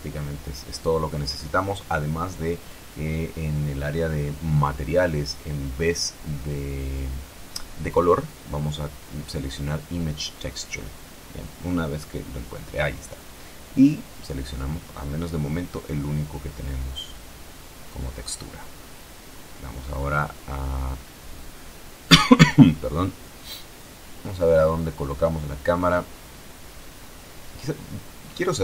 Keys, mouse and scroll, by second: 4.8 scroll up 2, 5.1 scroll down 2, 9.0 click, 12.4 click, 13.9 click, 15.2 click, 17.7-18.8 drag, 19.2 Tab, 22.1 shift+middle click, 24.7 shift+middle click, 26.2-27.9 middle drag, 27.9-28.5 shift+scroll up 1, 28.5 shift+middle click.